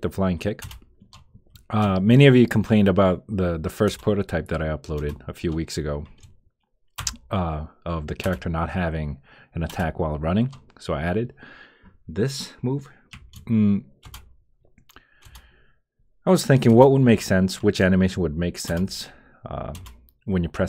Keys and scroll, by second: 0.6 Return, 3.9 Return, 5.0 Return, 7.0 Return, 8.2 Return, 9.7 Return, 14.0 Return, 15.2 Return, 16.7 Return, 18.6 Return, 19.7 Return.